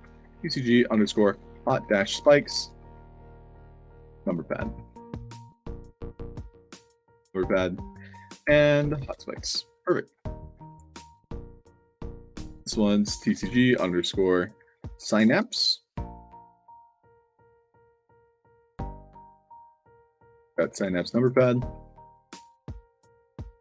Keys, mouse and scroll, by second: 0.0 shift+c, 1.1-4.1 typing, 4.4 ctrl+a, 4.7 ctrl+c, 5.5 click, 6.7 ctrl+v, 7.0 click, 7.7 click, 8.0 ctrl+v, 9.7-11.7 typing, 10.6 click, 13.1 shift+c, 14.6-15.8 typing, 17.1-18.2 typing, 18.2 ctrl+a, 18.5 ctrl+c, 19.1 click, 19.8 click, 20.1 ctrl+v, 20.5 space, 20.9 shift+p, 21.4 ctrl+a, 21.6 ctrl+c, 23.3 ctrl+v.